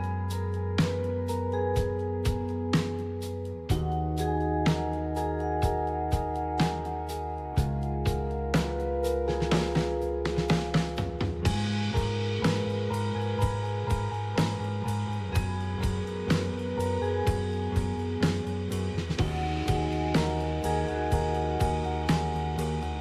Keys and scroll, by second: 0.0-0.1 typing, 9.9 ctrl+c, 10.6 alt+Tab, 14.7 Right.